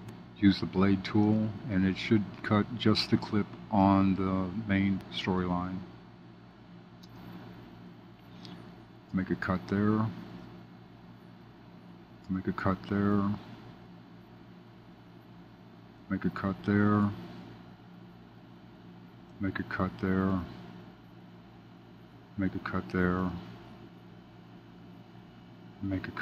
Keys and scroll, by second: 9.0 super+b, 12.2 super+b, 15.9 super+b, 19.2 super+b, 22.2 super+b, 25.6 super+b.